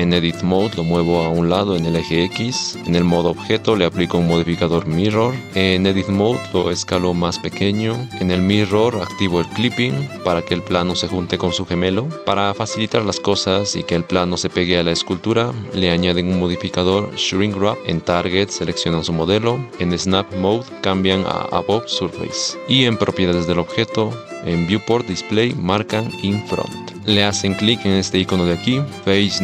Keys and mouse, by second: 0.3 Tab, 0.7 g, 1.8 r, 2.8-5.5 drag, 5.5 KP_1, 5.5 g, 10.2 g, 11.0 g, 12.2 KP_7, 12.9 g, 14.9-29.4 drag.